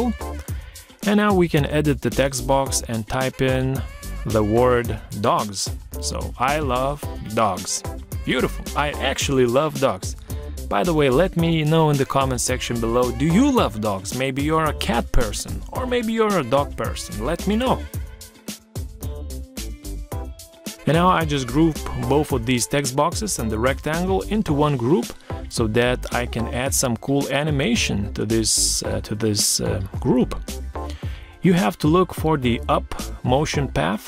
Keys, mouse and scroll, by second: 2.3 BackSpace, 2.5 BackSpace, 3.5 Caps_Lock, 4.3-5.4 typing, 13.1 ctrl+scroll down 1, 15.4 shift+click, 16.2 shift+click, 17.1 ctrl+g, 19.2 shift+click, 22.0 ctrl+z.